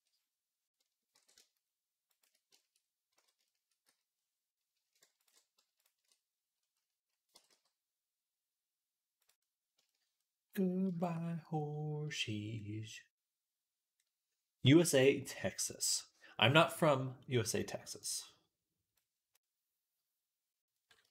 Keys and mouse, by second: 1.0 ctrl+b, 2.1-6.6 shift+right drag, 3.0 z, 3.7 z, 5.0 ctrl+alt+shift+click, 7.2-9.7 drag, 7.2 g, 9.6-10.7 shift+right drag, 11.8 click, 12.4-21.1 right drag, 14.6 click, 17.9-21.1 drag.